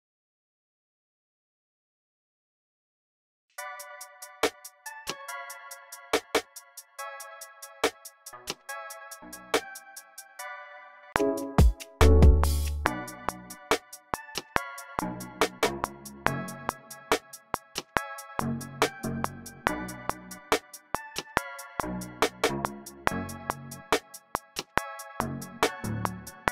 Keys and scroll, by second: 0.6 c, 1.8 c, 2.7 u, 3.2 space, 4.7 super+k, 4.9-6.0 typing, 8.1-11.0 typing, 12.7-13.4 typing, 14.9-16.7 typing, 18.3-20.6 typing, 21.7-24.0 typing, 25.1-26.2 typing, 26.4 super+k.